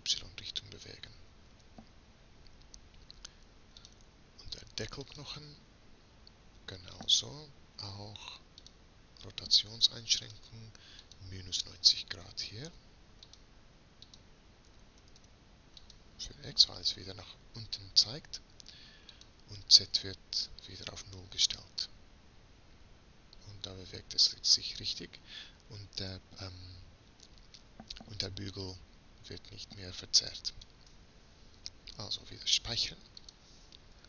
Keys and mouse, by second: 2.5-4.3 middle drag, 4.3-5.6 drag, 8.8-12.2 middle drag, 13.9-15.3 middle drag, 15.3-18.6 drag, 20.4-21.8 drag, 21.8 r, 32.6 ctrl+s.